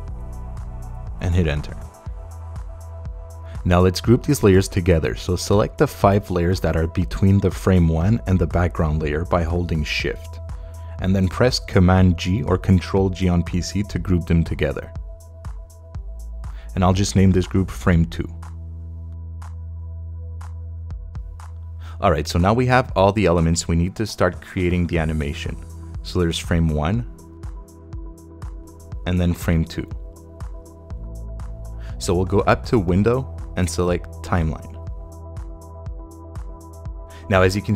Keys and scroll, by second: 1.3 Page_Up, 12.1 super+g, 18.1-20.1 typing, 20.1 Return.